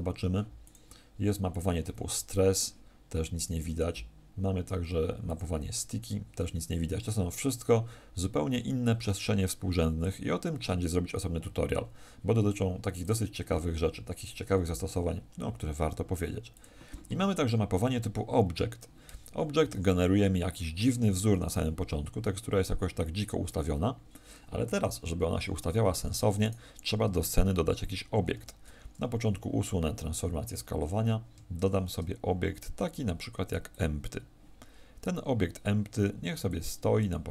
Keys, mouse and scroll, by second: 25.7 Escape, 26.3 right click, 28.3 alt+s, 31.5 shift+a, 36.4 click.